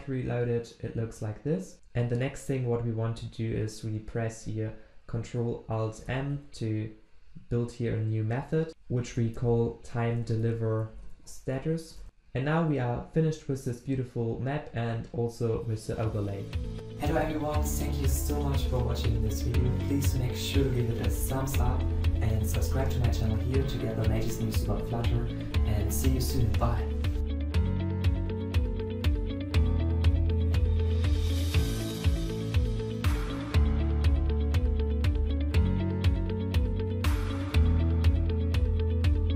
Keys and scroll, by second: 6.2 ctrl+alt+m.